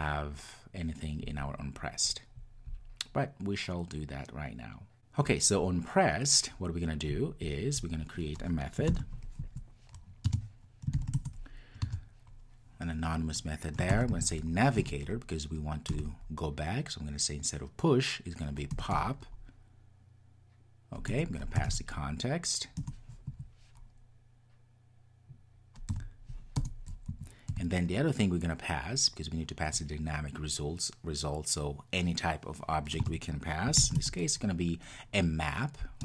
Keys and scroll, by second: 14.8 Return, 21.1 Return.